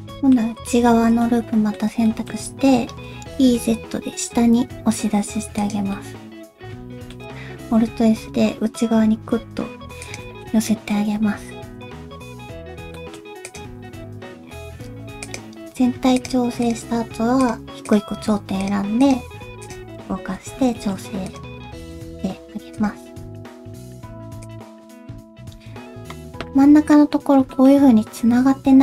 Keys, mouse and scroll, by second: 0.5 scroll up 1, 0.9 alt+z, 1.1 scroll up 1, 1.2 middle click, 2.0 shift+middle click, 2.3-2.8 scroll up 1, 2.8 scroll down 1, 3.3 e, 5.9 middle click, 7.2 ctrl+z, 7.6 alt+s, 10.4 middle click, 11.6 KP_1, 11.9 scroll up 2, 12.9 shift+middle click, 13.4 click, 13.8 alt+z, 13.9 scroll up 1, 14.3 g, 15.6 g, 16.6 click, 16.8 g, 17.8 click, 18.0 g, 19.0 click, 19.2 g, 19.9 scroll down 1, 20.2 alt+z, 20.7 shift+middle click, 20.9 click, 21.2 click, 21.9 click, 22.3-22.7 scroll up 1, 22.7 click, 23.2 g, 24.8-25.3 scroll down 1, 25.8 scroll up 1.